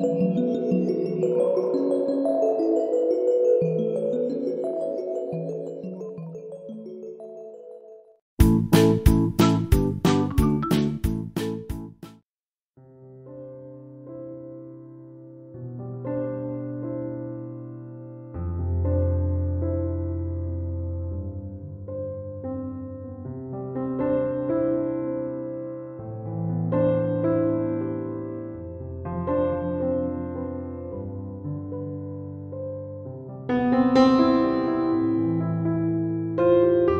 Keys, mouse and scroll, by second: 2.3 ctrl+7, 34.4 Escape.